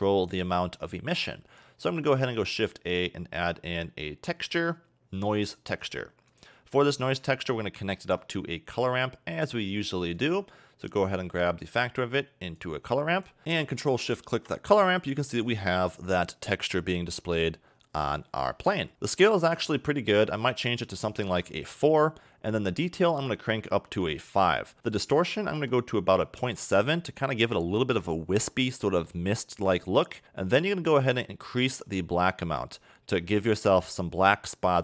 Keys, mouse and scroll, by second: 0.0 click, 0.9 middle click, 1.3-1.9 scroll up 2, 1.9 shift+a, 7.9 shift+a, 11.6 click, 14.1 ctrl+shift+click, 15.9 middle click, 16.9 middle click, 17.7 scroll down 1, 20.6 click, 23.1 click, 24.7 middle click, 24.9 click, 28.5 middle click, 30.6 click.